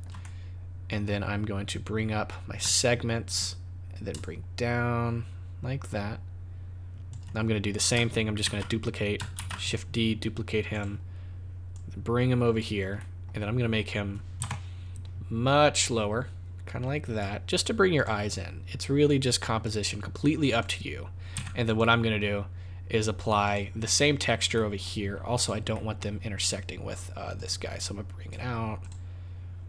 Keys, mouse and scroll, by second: 0.2 middle click, 2.6 shift+click, 4.2 shift+click, 7.3-7.9 scroll down 4, 8.4 shift+s, 9.3 shift+d, 10.7 click, 11.7 click, 12.9 middle click, 14.3 KP_0, 15.8 click, 17.9 click, 19.0 click, 20.4 click, 21.3 z, 23.5 click, 24.6 middle click, 25.4 click, 25.8 middle click, 26.2 scroll down 2, 27.4 click, 28.8 click.